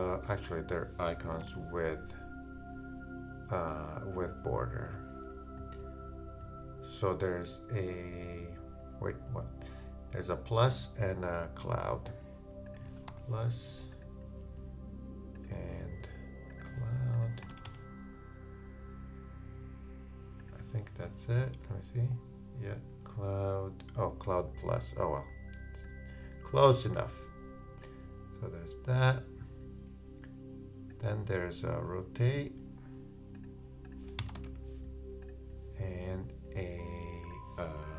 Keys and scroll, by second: 1.4 super+z.